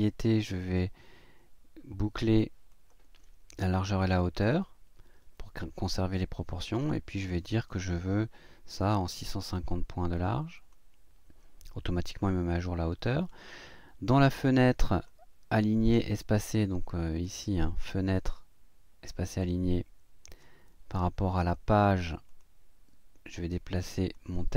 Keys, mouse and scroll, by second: 2.7 click, 6.9 click, 8.7 KP_6, 8.9 KP_5, 9.1 KP_0, 10.5 click, 14.4 click, 17.2 click, 20.3 click, 21.4 click, 22.3 click, 23.9 click.